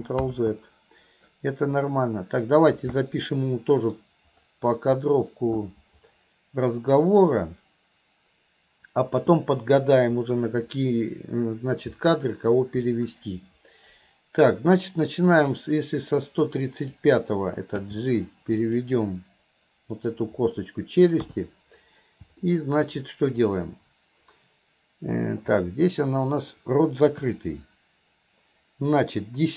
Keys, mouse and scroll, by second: 3.5 middle click, 15.5 click, 16.5-17.0 drag, 17.9 g, 19.9 click, 22.5 middle click, 25.7 middle click.